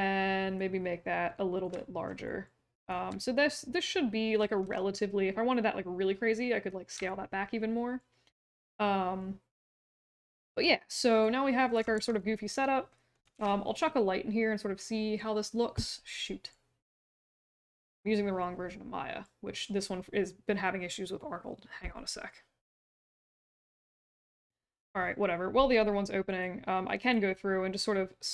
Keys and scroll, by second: 4.6 r, 11.9 q, 13.3 ctrl+s.